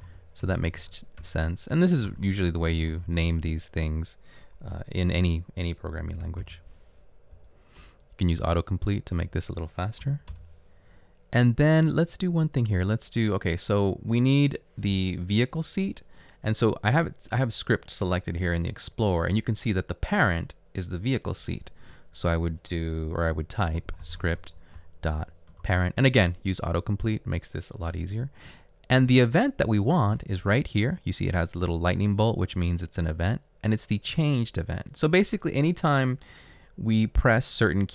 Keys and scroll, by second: 0.3-3.6 typing, 7.4 Right, 7.8 Return, 8.1-8.8 typing, 9.2 Down, 10.4 Return, 23.5-26.2 typing, 29.1 ..